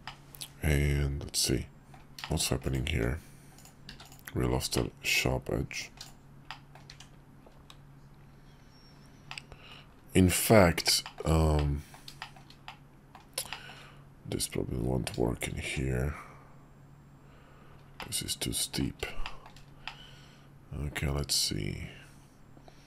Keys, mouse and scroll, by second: 0.0-2.0 middle drag, 2.2 shift+middle drag, 2.9 Tab, 3.6 click, 3.9 q, 4.7 click, 5.7 click, 5.9 q, 6.5 click, 6.9 Tab, 9.3-9.7 drag, 10.3 Tab, 11.0 shift+middle click, 11.5 middle click, 12.2 shift+middle click, 12.7 middle click, 13.5 shift+middle click, 15.6 Tab, 18.0-18.8 middle drag, 19.2 shift+middle drag, 19.8-22.8 middle drag.